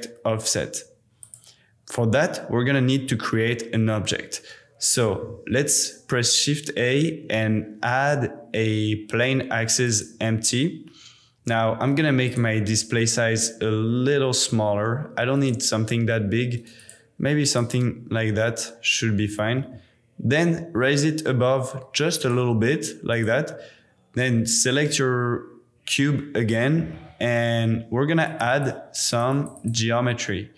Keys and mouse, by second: 0.4 click, 1.2 click, 5.1 shift+a, 11.8 click, 13.5 click, 15.4 click, 16.6 click, 17.5 click, 19.3 g, 19.6 z, 22.2 click, 28.6 click, 29.1 click, 29.4 click, 29.7-30.5 drag.